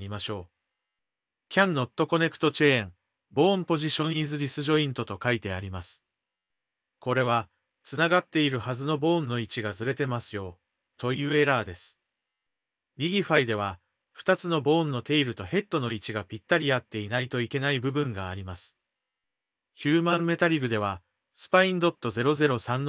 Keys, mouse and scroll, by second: 0.9-2.0 drag, 14.0 click, 15.3 Tab, 16.3 shift+middle click, 17.9 click, 18.4 shift+middle click, 18.7 middle click, 20.1 shift+middle click.